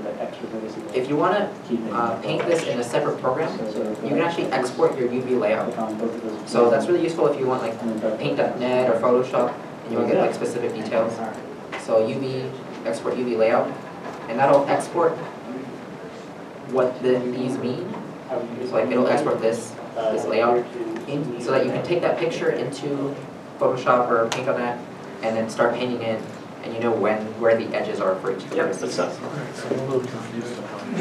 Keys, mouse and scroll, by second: 6.2 Tab, 6.4 Tab.